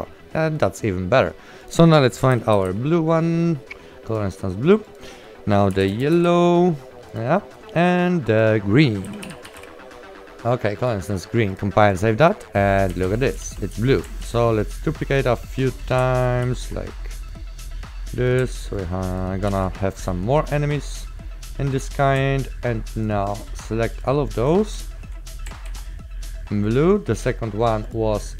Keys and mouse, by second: 1.7 click, 2.8 e, 4.2 click, 5.8 y, 6.4 w, 7.2 click, 7.5 right click, 8.5 click, 9.1-10.2 typing, 10.9 click, 12.8 right click, 12.9-14.4 typing, 14.4 ctrl+w, 14.8 click, 16.5 ctrl+w, 17.4 click, 18.8 ctrl+click, 19.6 ctrl+w, 20.5 click, 23.1 ctrl+click, 24.6-25.4 typing, 24.9 right click, 25.8 ctrl+w.